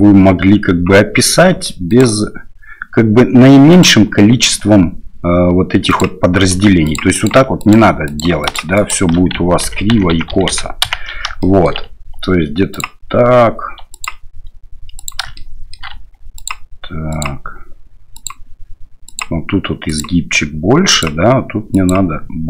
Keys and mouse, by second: 1.9 ctrl+click, 3.7 ctrl+click, 5.9 ctrl+click, 6.8 ctrl+click, 7.1 ctrl+click, 7.6 ctrl+click, 8.1 ctrl+click, 8.4 ctrl+click, 8.7 ctrl+click, 9.6-11.0 ctrl+z, 11.4 shift+middle click, 12.8-14.0 ctrl+drag, 15.0 ctrl+click, 15.3 shift+middle click, 16.4 ctrl+click, 17.2-18.3 ctrl+drag, 19.1 ctrl+click, 19.9 ctrl+click, 20.9 ctrl+click.